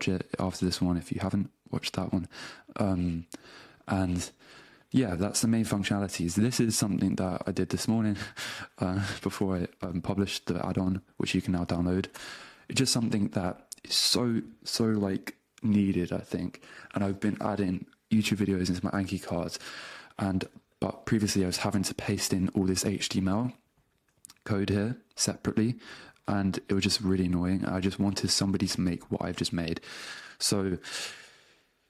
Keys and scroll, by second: 7.4 BackSpace, 9.2 super+v, 12.2 Return, 21.0 shift+super+x, 27.6 shift+super+x, 29.2 BackSpace, 30.5 Down, 30.9 BackSpace.